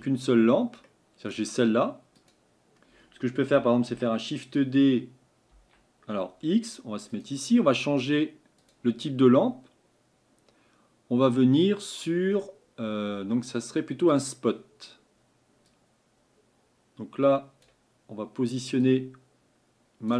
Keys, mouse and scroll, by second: 0.8-2.3 middle drag, 2.3 click, 3.9 shift+d, 14.1 click.